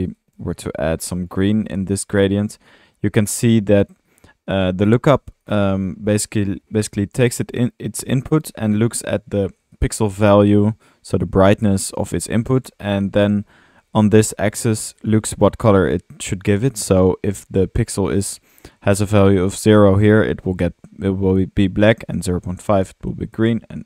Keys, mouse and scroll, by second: 3.1 middle click, 4.1-5.5 drag, 6.0-6.4 middle drag, 6.9-7.4 drag, 8.6-9.7 middle drag, 9.7-10.2 drag, 12.7-14.0 middle drag.